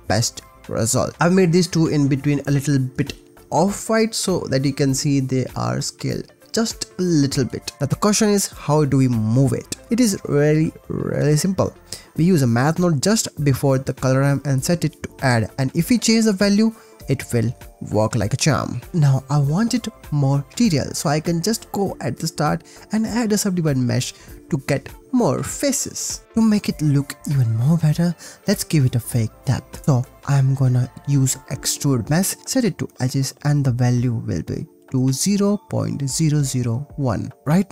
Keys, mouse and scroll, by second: 0.0 click, 0.1 click, 1.0 click, 2.6 click, 2.9 click, 8.0 ctrl+s, 8.4 click, 11.7 click, 11.7 shift+a, 13.1 click, 14.5 click, 16.3 shift+click, 17.1-18.7 shift+middle drag, 19.1 click, 19.4 click, 19.9 shift+a, 26.2 ctrl+s, 30.1 click, 30.8 click, 31.1 click, 31.7 shift+a, 34.5 click, 36.2-36.8 drag, 37.1-37.7 drag.